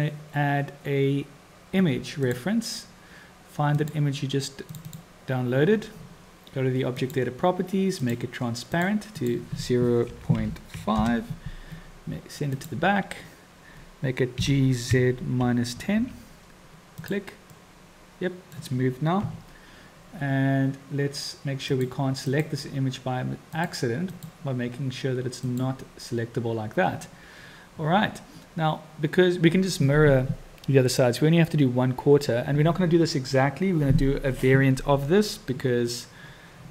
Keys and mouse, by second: 7.0 click, 7.9 click, 8.7 click, 9.3-11.7 drag, 12.5 click, 14.4 g, 17.5 middle drag, 17.7-18.0 drag, 18.0-18.5 middle drag, 19.1 KP_7, 21.7 click, 22.3-24.5 drag, 25.4 click.